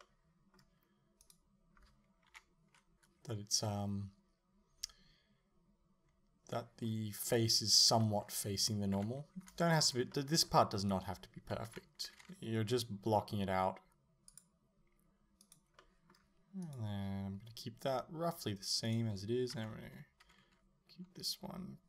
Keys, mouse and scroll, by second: 0.0-1.2 middle drag, 1.2 right click, 2.3 KP_7, 6.6 middle click, 7.3 right click, 8.0 middle click, 9.0 KP_7, 9.7-10.8 shift+middle drag, 10.8 right click, 11.7 KP_7, 12.8 g, 14.4 click, 15.5 right click, 15.8 middle click, 16.7 right click, 18.9 right click, 19.6 KP_7, 20.5 g.